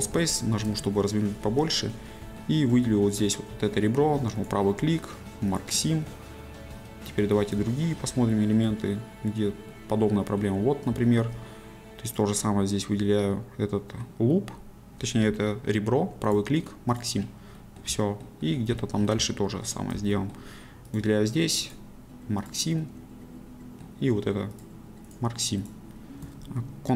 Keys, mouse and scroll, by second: 0.9-3.2 shift+middle drag, 6.0-7.2 middle drag, 7.7-10.6 shift+middle drag, 11.1 shift+middle click, 12.4-17.0 middle drag, 17.0 right click, 17.6-18.8 middle drag, 20.1 shift+middle click, 22.5 right click, 22.8-24.6 middle drag.